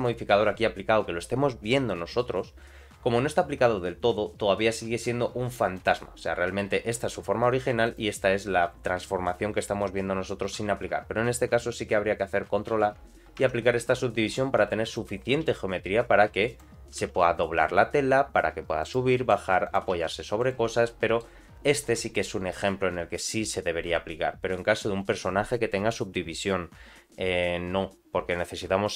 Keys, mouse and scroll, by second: 0.0 click, 5.8 click, 7.8 click, 12.7 ctrl+a, 13.4 Tab, 13.8 middle click, 14.5 1, 14.9 click, 15.3 g, 19.1 middle click, 19.6 click, 19.8 g, 20.6 Tab, 20.9 middle click.